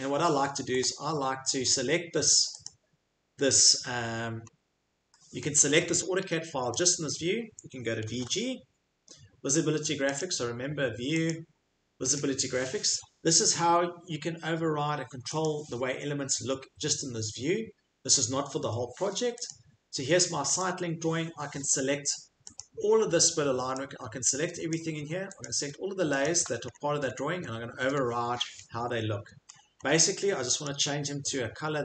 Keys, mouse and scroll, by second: 0.8 right click, 0.8 scroll, 2.7 click, 4.5-5.9 scroll, 5.9-6.2 middle click, 6.2 Escape, 6.5 Escape, 10.0-10.7 typing, 10.2 click, 11.3 click, 12.2 click, 15.4 click, 18.1 click, 19.4 click, 22.5 click, 25.4 shift+click, 26.2 shift+click, 26.7-27.4 scroll, 27.9 shift+right click, 27.9-29.6 scroll, 29.9 middle click, 30.6 click.